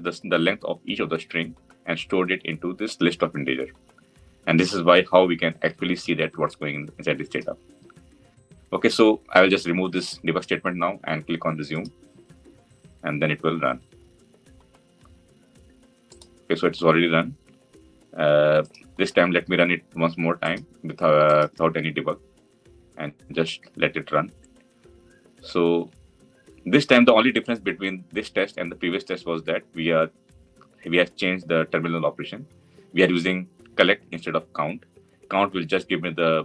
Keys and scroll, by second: 11.6 F9.